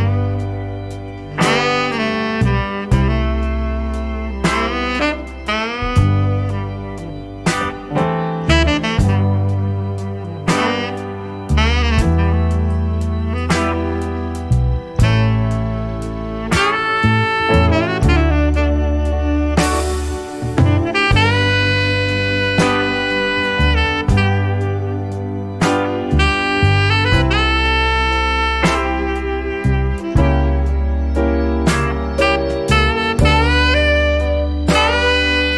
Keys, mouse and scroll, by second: 0.2-0.5 scroll down 2, 1.4 click, 2.7 click, 4.1 click, 5.9-8.9 drag, 9.5-12.1 drag, 13.1 click, 13.9 click, 16.5 click, 17.1-17.5 scroll down 1, 18.1 click, 19.1-20.7 drag, 21.5 click, 22.0 click, 22.7 scroll down 2, 23.3 scroll up 2, 25.5 click, 26.5 click, 28.5 click, 30.6 click, 32.7 click, 33.2 click, 33.9 click, 34.9 scroll down 2.